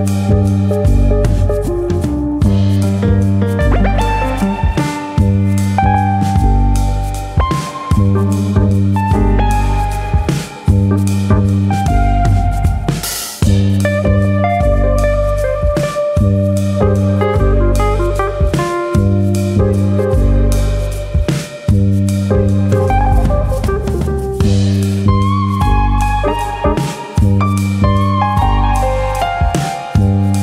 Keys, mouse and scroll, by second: 0.0 click, 1.0 alt+click, 1.3 alt+click, 1.4 click, 2.4 alt+click, 2.7 click, 3.8 alt+click, 4.6 r, 5.2 click, 5.8 middle click, 6.5 middle click, 7.4 3, 7.9 middle click, 9.5 middle click, 9.5 click, 10.1 shift+click, 10.8 x, 12.6 middle click, 13.0-13.3 scroll up 2, 13.3 middle click, 14.1 2, 14.6 click, 15.1 ctrl+click, 15.6 alt+shift+click, 17.7 ctrl+e, 18.4-19.3 scroll down 6, 18.7 middle click, 19.3 middle click, 19.6 Tab, 19.9 middle click, 20.1-20.8 scroll down 2, 20.8 click, 21.1-21.5 scroll down 2, 21.3 middle click, 21.8 click, 22.1-22.6 scroll down 2, 22.3 middle click, 22.9-23.5 scroll down 2, 23.2 middle click, 23.6 scroll up 2.